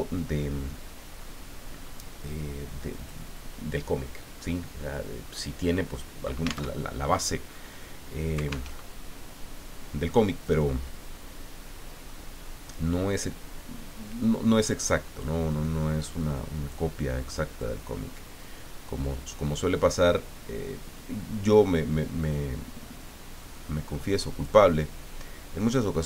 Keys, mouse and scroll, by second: 1.2-1.5 scroll down 2, 1.8 scroll up 2, 2.4 scroll up 1, 3.0 click, 6.8 alt+Tab, 8.7 alt+Tab, 10.4-15.0 drag, 15.6-16.9 drag, 17.6-24.7 drag, 25.6-26.0 drag.